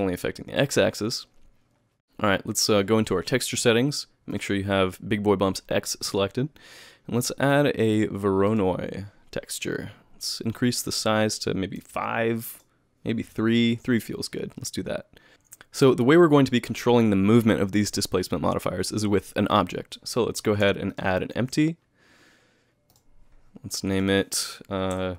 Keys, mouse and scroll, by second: 3.6 click, 4.3 click, 9.9 click, 10.9 click, 12.6 click, 15.3 shift+a, 20.9 shift+right click, 21.2 shift+a, 23.9 click.